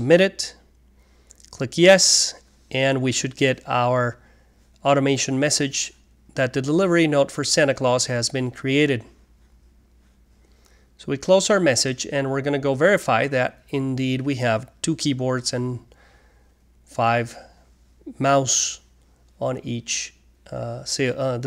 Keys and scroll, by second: 4.7 typing, 8.4 typing, 11.3 typing, 16.9-20.3 typing.